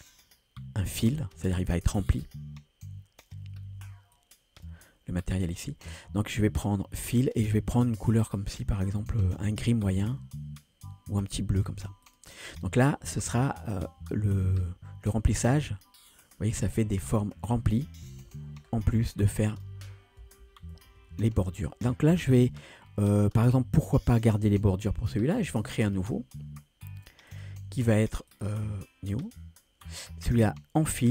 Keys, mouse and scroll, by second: 0.7 scroll down 1, 1.1 click, 1.9-3.2 scroll up 2, 3.2-4.2 scroll up 1, 4.2 click, 5.7-6.2 scroll down 2, 7.3 click, 15.3-16.7 drag, 17.2 scroll up 2, 18.1 ctrl+z, 18.7 scroll down 1, 19.2 click, 20.8 ctrl+z, 25.8 click, 27.3-28.4 drag, 29.2 click, 30.8 click.